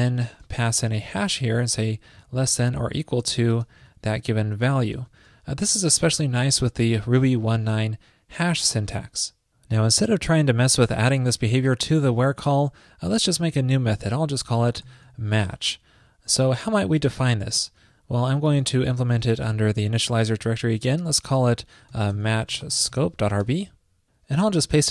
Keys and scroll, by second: 4.0 alt+Right, 4.3 alt+Right, 4.6 alt+Right, 17.4 super+s.